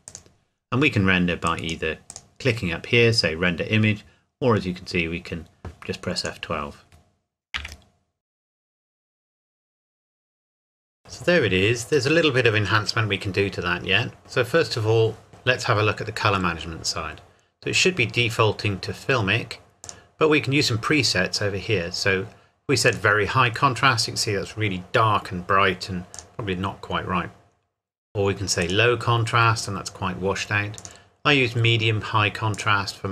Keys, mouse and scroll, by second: 0.1 click, 6.2 click, 7.5 F12, 8.1 scroll up 1, 11.2-13.1 scroll up 1, 13.1-13.5 scroll down 1, 14.2-16.4 scroll up 1, 19.8 click, 22.9 click, 26.1 click, 28.6 click.